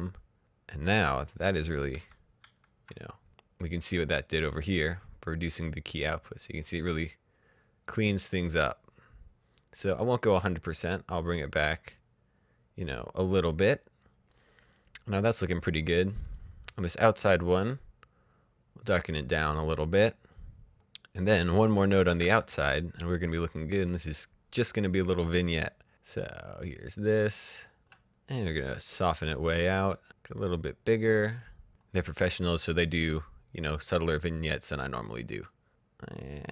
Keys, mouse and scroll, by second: 1.3 ctrl+d, 1.6 typing, 2.9 click, 16.0 click, 17.7-18.9 scroll down 1, 19.5 click, 20.7 click, 21.6 alt+s, 22.8 click, 25.7 click, 27.1-28.1 scroll down 1, 28.3 click, 31.6 click, 33.2 click, 36.0-36.5 scroll down 1.